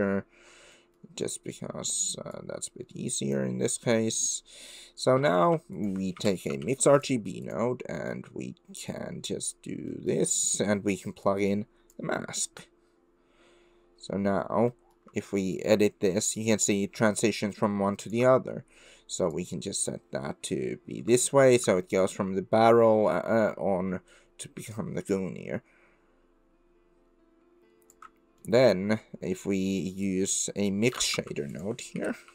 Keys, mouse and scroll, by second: 0.9 middle drag, 2.3 click, 2.4-3.3 middle drag, 3.8 click, 5.4 shift+a, 7.9 click, 8.9-9.5 drag, 9.9 click, 11.3-12.0 drag, 14.8 middle click, 15.6-18.1 shift+middle drag, 19.3 middle click, 22.1 shift+click, 22.1-28.0 shift+middle drag, 28.5 middle click, 29.6 middle click, 30.0 click, 30.8 click, 31.2 shift+a.